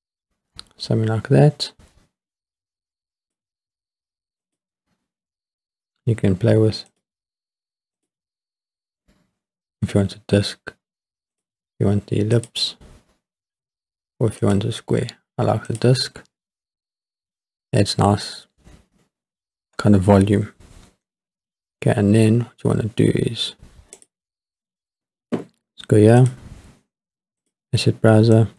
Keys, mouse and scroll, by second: 2.6 scroll down 2, 3.3-4.6 drag, 6.9-8.1 drag, 11.3-12.5 drag, 14.4-15.8 drag, 16.4 scroll up 2, 17.1 scroll down 3, 24.6 click, 27.5 click, 28.4 click.